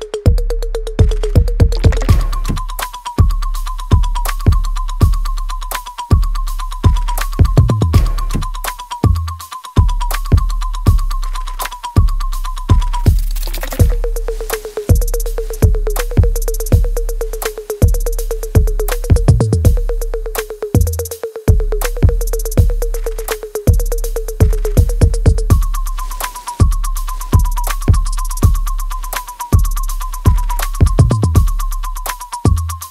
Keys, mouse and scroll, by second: 1.8 alt+right click, 2.9 r, 3.7 click, 8.4 alt+right click, 9.0 alt+click, 10.3 right click, 11.1 click, 11.5-13.1 alt+right drag, 13.1 click, 13.1 click, 13.6 space, 14.7 alt+right click, 16.4 click, 17.6 space, 18.9 alt+right click, 20.2 w, 20.8-23.9 drag, 23.9 e, 25.3-27.8 drag, 27.8 alt+click, 29.2 alt+right click, 29.8-31.7 alt+drag, 31.7 ctrl+z, 32.8 alt+right click.